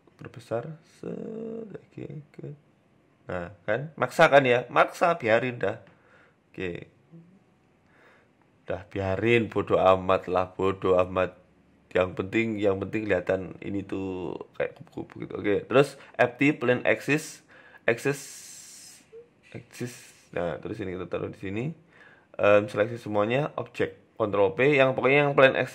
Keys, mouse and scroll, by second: 0.7 s, 1.9 g, 3.1 Tab, 3.3 scroll down 3, 3.4 middle click, 5.1 s, 6.4 Tab, 6.6 middle click, 6.9 Tab, 7.1-7.7 scroll down 4, 7.3 middle click, 7.7-8.2 scroll up 6, 8.2 Tab, 8.5 Tab, 8.5-8.9 scroll down 1, 9.1-10.3 scroll down 5, 9.4 middle click, 9.8 shift+middle click, 10.3 KP_3, 11.0 KP_1, 11.5 scroll up 4, 11.7 shift+middle click, 12.2 click, 12.7 shift+a, 13.7 shift+a, 16.8 s, 17.8 click, 18.5 shift+right click, 18.8 s, 19.8-20.2 scroll up 4, 20.2 g, 21.1 right click, 22.0 ctrl+z, 22.2 shift+right click, 22.8 ctrl+p, 23.7 right click, 24.0 shift+middle click, 24.3-25.6 scroll down 6, 24.8 g, 25.6 scroll up 5.